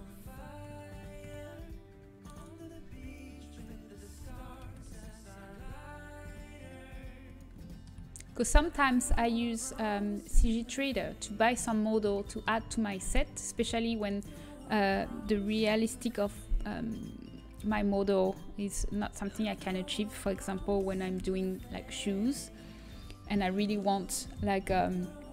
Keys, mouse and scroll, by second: 1.7 s, 7.6 middle click, 9.9 g, 13.5 a, 13.9-15.6 right drag, 15.6 g.